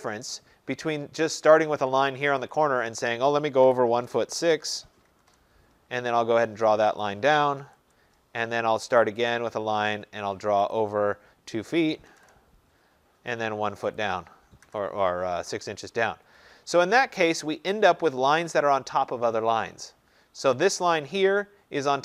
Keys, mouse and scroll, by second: 2.6 click, 3.5-5.6 typing, 7.1 click, 7.8 Return, 9.3 click, 10.8 click, 11.7-12.2 typing, 14.0 click, 14.7 Return, 20.7 click.